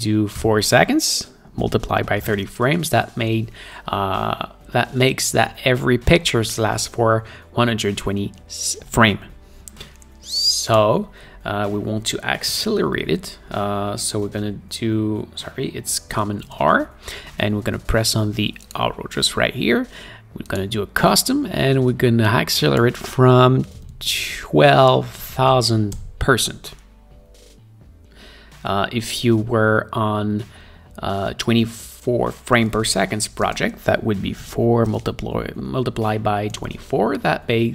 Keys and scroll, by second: 0.7 4, 1.9-3.1 typing, 13.0 ctrl+r, 16.8 super+r, 23.8-25.6 typing, 34.8 4, 35.4 ., 36.7-37.7 typing.